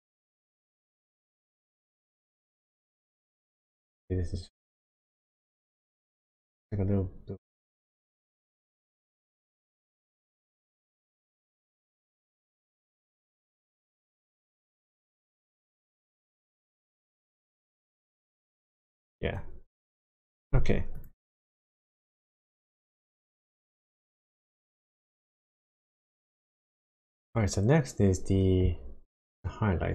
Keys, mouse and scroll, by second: 6.3 g, 7.8 click, 8.3-9.3 scroll down 6, 9.6-10.5 scroll up 5, 11.0-11.7 scroll up 3, 11.7 click, 20.9 click, 21.6-23.3 scroll down 2, 23.5 shift+middle click, 26.5 shift+middle click, 27.5-29.6 scroll down 2.